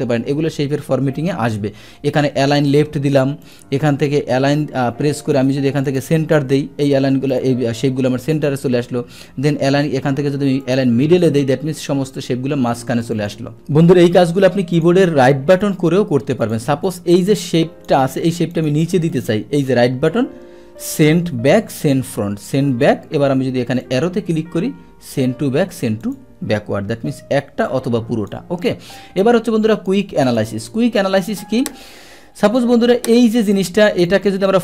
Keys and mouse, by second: 2.6 click, 3.4 click, 5.8 click, 7.3 click, 10.6 click, 13.2 click, 13.8 ctrl+z, 14.7 click, 15.6 right click, 16.4 click, 16.9-17.9 drag, 18.5 click, 19.1 right click, 19.2 click, 23.8 click, 26.0 click, 27.7 click, 29.7 click, 30.2 click, 33.1 click, 33.5 click, 34.0 click.